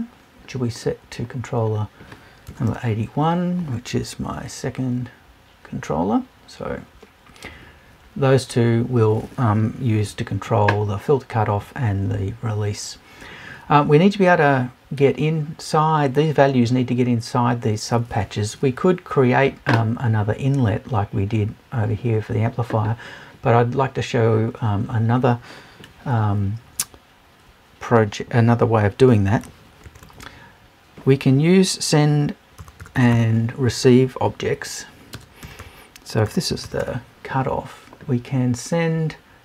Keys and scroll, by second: 2.5 BackSpace.